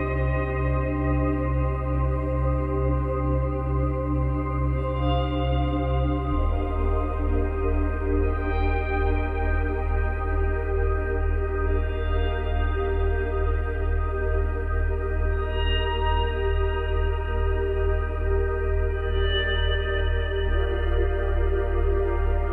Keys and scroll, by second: 10.4 ctrl+v.